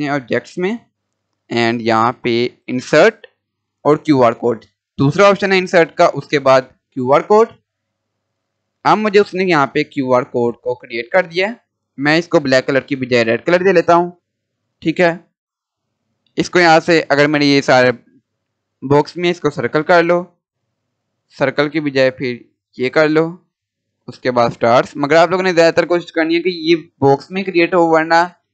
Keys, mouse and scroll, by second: 0.0 click, 7.4 click, 7.4 click, 9.7 scroll up 1, 12.2 click, 19.3 click.